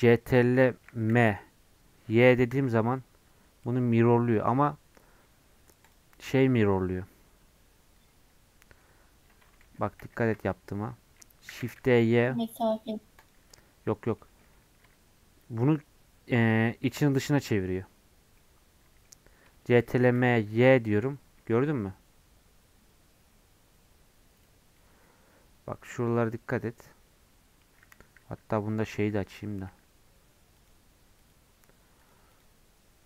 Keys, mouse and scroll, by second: 1.1 ctrl+m, 6.2-9.6 middle drag, 9.6 ctrl+z, 10.0 ctrl+z, 11.4 shift+d, 14.1-20.0 middle drag, 20.0 ctrl+m, 28.8 middle click, 29.2 click, 29.6 n, 30.5-33.0 drag.